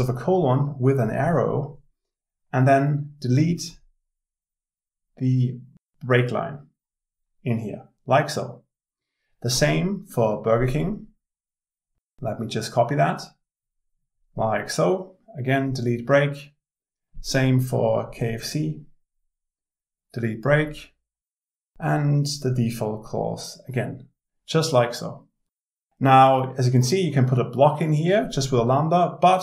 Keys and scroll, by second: 29.0 alt+Return.